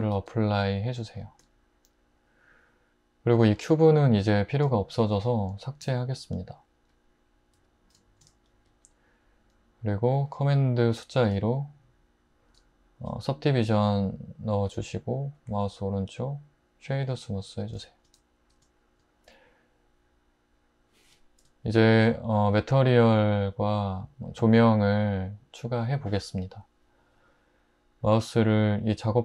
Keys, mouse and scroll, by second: 0.2 super+a, 5.8 x, 7.6 `, 11.3 super+2.